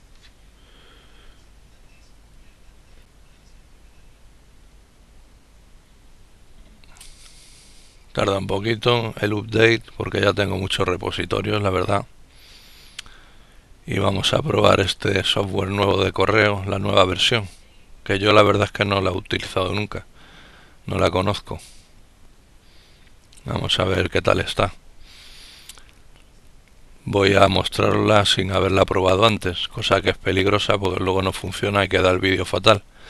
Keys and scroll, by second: 0.7-1.4 typing.